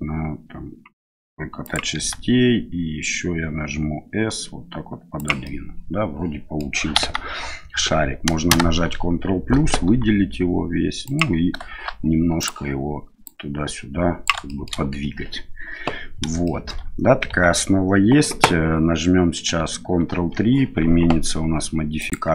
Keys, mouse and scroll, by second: 2.0 s, 5.5-6.6 middle drag, 6.9 KP_1, 9.8 s, 12.4 click, 13.2-14.2 drag, 14.5 shift+middle click, 16.4 shift+middle click, 17.3 Tab, 20.1 ctrl+3, 22.0 click.